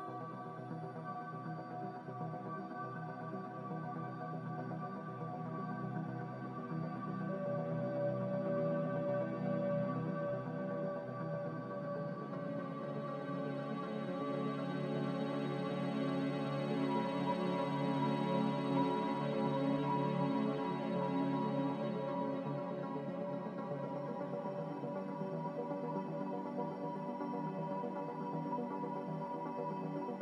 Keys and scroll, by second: 6.1-6.9 typing, 17.9-18.8 typing, 21.8 ctrl+z.